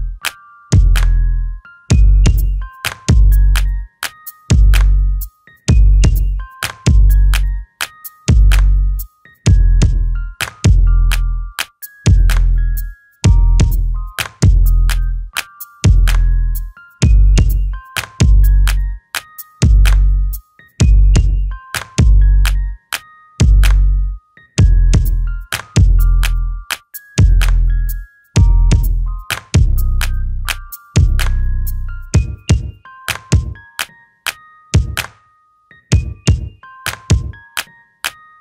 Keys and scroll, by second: 8.4 Escape, 22.0 m, 36.5 space, 38.0 shift+x.